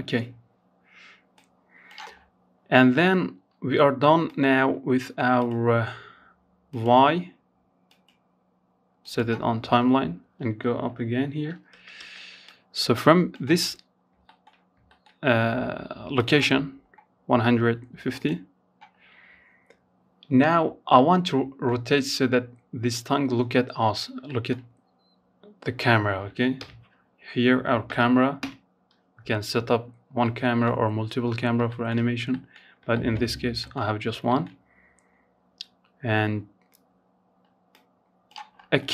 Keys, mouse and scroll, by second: 0.3-0.8 scroll up 5, 0.8-1.5 scroll down 1, 1.5-2.4 scroll down 1, 2.4-7.7 drag, 7.7-9.2 scroll down 2, 9.9 space, 10.2 space, 10.6-12.1 drag, 12.1 scroll up 1, 12.4 shift+middle click, 12.7-13.0 scroll up 2, 13.0-14.3 shift+middle drag, 14.3 click, 16.3-17.4 drag, 17.4 scroll down 2, 19.1-22.1 middle drag, 22.1-22.4 scroll up 1, 22.4-23.8 shift+middle drag, 23.8-24.1 scroll up 1, 24.1-24.5 scroll down 1, 24.8 KP_0, 26.6 KP_0, 27.3-28.0 scroll down 3, 28.0 scroll up 2, 28.4 middle click, 29.1-29.7 scroll up 4, 29.9 shift+middle click, 30.2 scroll down 1, 30.5 shift+middle click, 30.8 scroll up 1, 31.1 shift+middle click, 31.4-31.8 scroll down 1, 31.8 shift+middle click, 32.0-32.4 scroll up 1, 32.4-35.5 shift+middle drag, 35.9 click, 36.7-37.3 scroll up 5, 37.3 middle click, 37.7-38.4 scroll up 1, 38.4-38.9 drag.